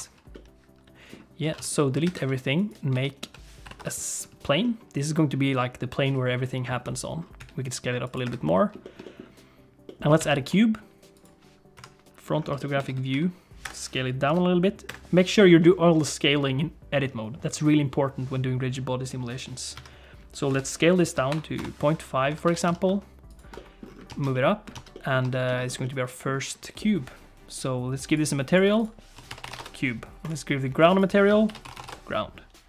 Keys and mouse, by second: 0.3 middle click, 1.4 a, 1.6 x, 2.0 shift+a, 2.9 Tab, 3.3 s, 4.6 middle click, 6.8 middle click, 7.4 s, 8.3 Tab, 8.4 shift+click, 8.8 shift+click, 9.1 click, 9.9 click, 10.2 shift+a, 11.8 KP_1, 12.6 shift+middle click, 12.9 Tab, 13.1 g, 14.3 s, 15.6 middle click, 19.7 KP_1, 20.5 s, 22.3 Tab, 22.4 g, 23.6 click, 24.1 alt+z, 24.3 click, 24.7 alt+z, 24.9 click, 25.3 shift+click, 25.8 middle click, 26.8 middle click, 28.7-30.0 drag, 31.0-32.3 drag.